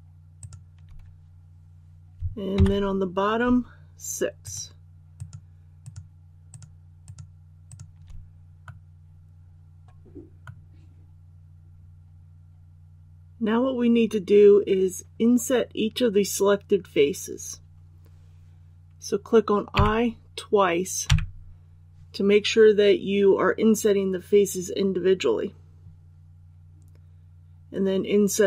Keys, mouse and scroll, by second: 0.4 shift+right click, 2.5 KP_7, 4.4 shift+right click, 5.1 shift+right click, 5.8 shift+right click, 6.5 shift+right click, 7.7 shift+right click, 8.6 middle click, 9.0-12.2 middle drag, 13.1-16.7 scroll up 1, 19.7 i.